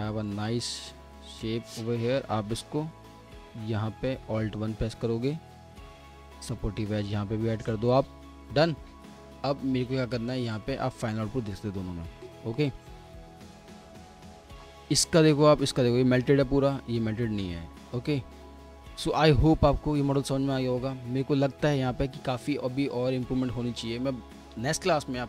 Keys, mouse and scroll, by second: 2.5 alt+middle click, 2.9 F4, 4.2 alt+1, 11.1 scroll down 1, 11.5 alt+middle click, 13.2 typing, 13.6 middle click, 14.3 middle click, 14.7-16.3 scroll down 1, 16.3 F4, 17.0 scroll up 1, 17.6 alt+middle click, 19.4-22.4 scroll up 1.